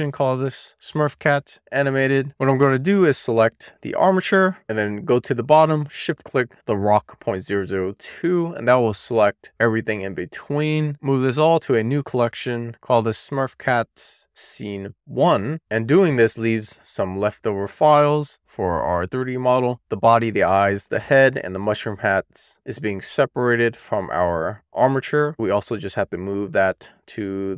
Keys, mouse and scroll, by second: 2.2 click, 4.4 click, 8.2 shift+click, 11.3 m, 13.7 BackSpace, 19.0-19.5 scroll down 1, 19.5-19.9 scroll down 1, 25.2 click, 26.4 click, 26.7 click.